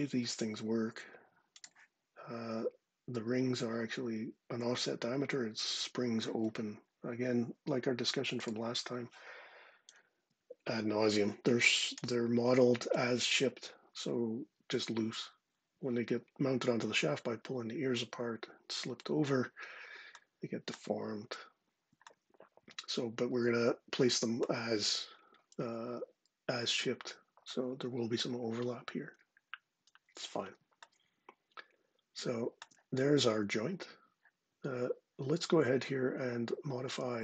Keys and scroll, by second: 9.7 ctrl+6.